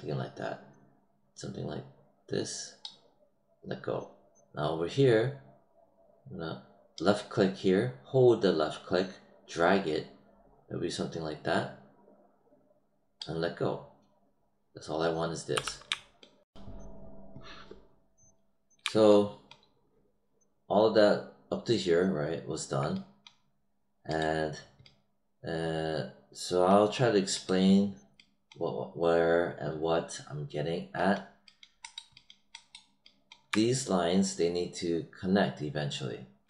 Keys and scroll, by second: 15.5 w.